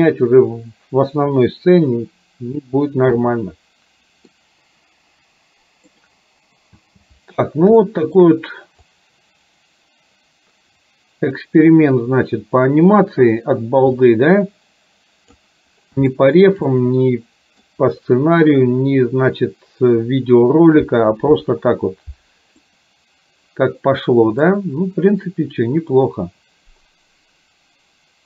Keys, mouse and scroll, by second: 4.4-6.0 middle drag, 6.9 space, 8.0 shift+middle drag, 9.0-15.5 drag, 16.2 shift+middle click, 16.7-17.6 middle drag, 22.7-24.5 middle drag, 26.0-28.2 drag.